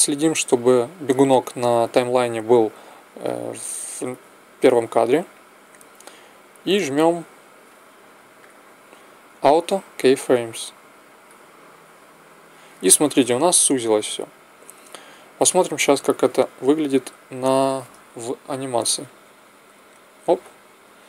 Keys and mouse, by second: 8.3-10.2 drag, 10.2 middle click, 10.9-12.7 drag, 12.7-14.6 middle drag, 16.3 Right, 16.9 Left, 19.2 alt+a.